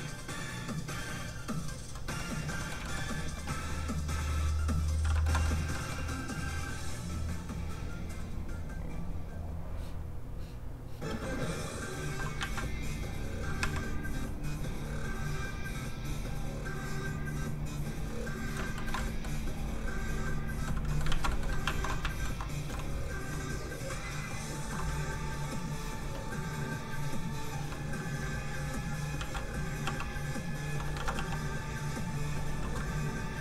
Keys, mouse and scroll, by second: 1.9 shift+z, 2.0 shift+middle click, 2.6 middle click, 2.8 shift+middle click, 5.3 middle click, 5.4 middle click, 7.7 click, 11.1 f, 11.2 click, 12.4 ctrl+z, 13.2 z, 13.3 click, 13.6 a, 17.0 click, 18.7 shift+middle click, 18.9 middle click, 19.0 middle click, 19.7 click, 20.6 middle click, 21.1 ctrl+z, 21.3 middle click, 21.9 alt+middle click, 22.0 alt+shift+middle click, 23.6 alt+shift+click, 23.7 click, 28.2 ctrl+click, 29.1 ctrl+z, 29.8 z, 29.9 f, 30.0 click, 30.9 ctrl+z, 31.2 f, 31.3 click, 32.9 ctrl+click.